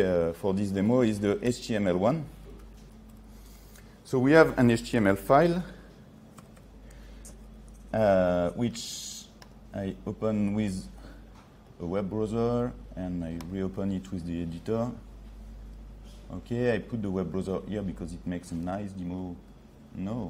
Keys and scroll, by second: 0.9 ctrl+3, 6.5 ctrl+-, 7.9 ctrl+-.